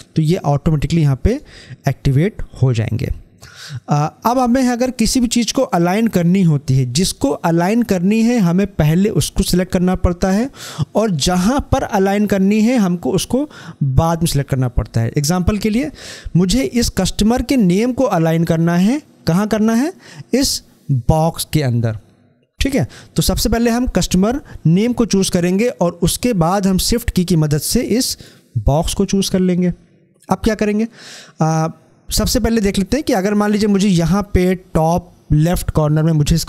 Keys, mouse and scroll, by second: 1.0 ctrl+shift+a, 26.9 click.